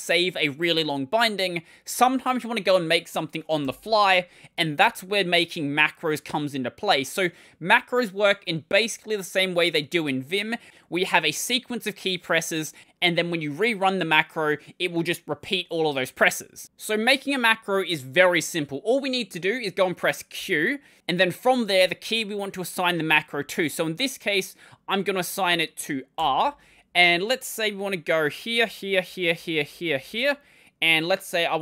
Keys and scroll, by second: 3.4 ctrl+;, 20.2 q, 28.2-29.9 typing.